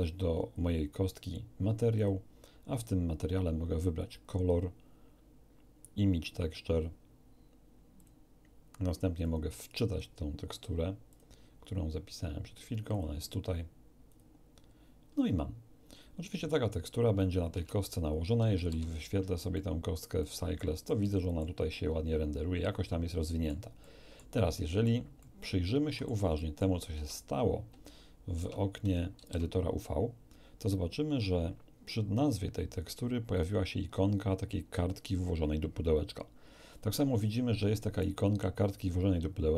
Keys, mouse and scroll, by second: 0.5 click, 1.9 click, 3.9 click, 7.9 click, 9.2 click, 11.1 click, 12.9 click, 14.1 click, 17.5 Tab, 18.5 shift+z, 19.5-20.1 middle drag, 20.9-21.5 middle drag, 21.7-23.7 middle drag, 23.8 middle click, 24.5 middle click, 25.2-26.2 middle drag, 26.3 middle click, 26.9 Tab, 28.3 Tab, 29.1 shift+z.